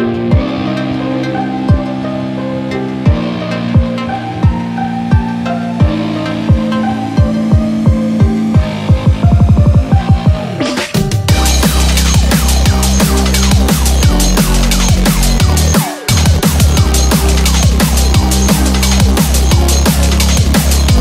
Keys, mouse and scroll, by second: 3.0-3.6 scroll down 4, 3.6 click, 4.2 KP_0, 5.5 middle click, 5.8 scroll up 3, 7.1 click, 12.1 click, 13.7 KP_0, 16.0 KP_Enter, 17.0 KP_0, 18.4 BackSpace, 20.8 click.